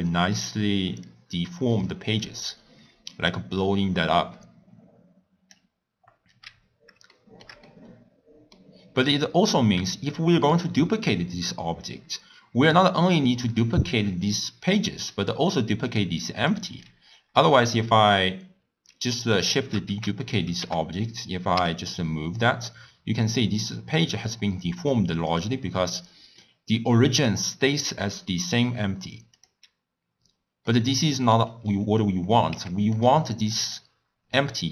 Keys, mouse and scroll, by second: 0.0-1.1 middle drag, 1.1-4.0 drag, 6.6-7.1 scroll down 1, 7.1-15.9 shift+middle drag, 15.9 click, 16.5 click, 19.5 shift+d, 27.6 click, 29.4 click, 30.7-33.3 middle drag, 33.3 x, 33.7 click.